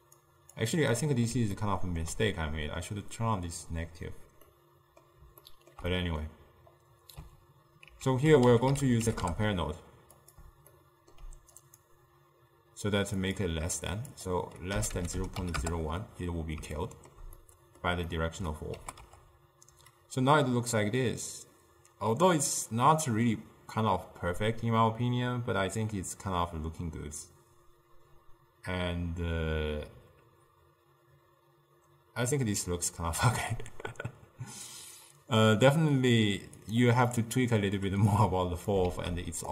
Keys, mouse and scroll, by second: 0.0 click, 0.6 click, 1.0-8.0 middle drag, 8.0 ctrl+a, 10.8-11.6 ctrl+middle drag, 11.6-16.8 drag, 16.8-18.8 shift+middle drag, 18.8 g, 37.2-38.2 middle drag, 38.2 click, 39.0 shift+d.